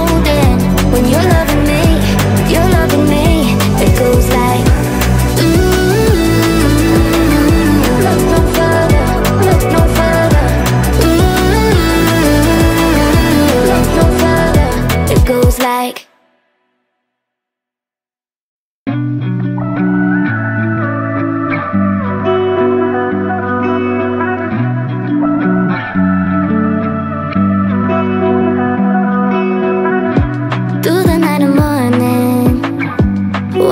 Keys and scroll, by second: 1.8 Delete, 19.1-21.4 typing, 22.6-25.6 typing, 29.4 w, 30.6-33.1 typing.